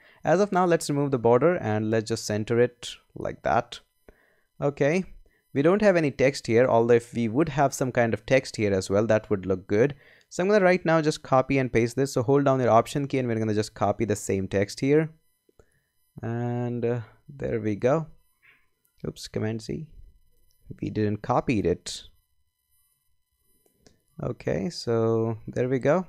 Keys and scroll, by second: 19.4 super+z.